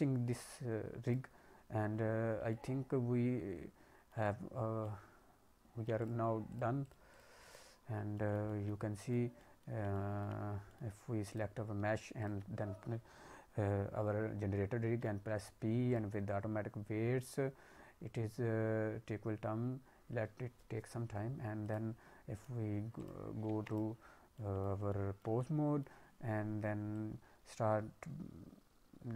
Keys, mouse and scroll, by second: 0.2 click, 0.2-1.0 scroll down 1, 1.0 click, 1.6-2.4 scroll down 4, 2.5 alt+middle click, 4.8 alt+middle click, 5.9 click, 6.5 click, 7.2 click, 7.4 click, 8.1 middle click, 8.4 alt+middle click, 8.9 scroll up 1, 9.1 middle click, 9.3 middle click, 9.9 alt+middle click, 10.4 scroll up 2, 10.6 middle click, 11.3 click, 12.1 shift+click, 14.8 ctrl+p, 21.6 click, 22.3 click, 22.9 click, 23.4 ctrl+Tab, 24.3 click, 24.3 middle click, 24.8 alt+middle click, 25.3 middle click, 26.9 click.